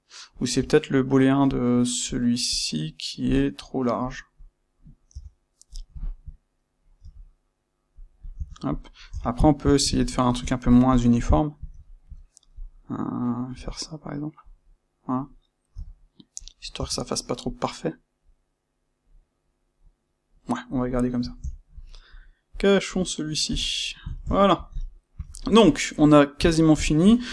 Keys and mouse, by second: 0.3 click, 1.4 click, 2.0 click, 2.5 click, 4.0 click, 4.3 click, 5.0 Tab, 5.6 click, 5.9 shift+click, 6.9 c, 8.0 click, 8.3 Tab, 8.6 click, 9.0 Tab, 9.9 ctrl+middle click, 10.8 click, 11.7-14.5 ctrl+middle drag, 13.4 c, 14.5 click, 15.7 c, 16.4 click, 16.6 Tab, 17.0-22.0 middle drag, 22.0 click, 22.4 click, 23.4 h, 23.6-27.3 middle drag.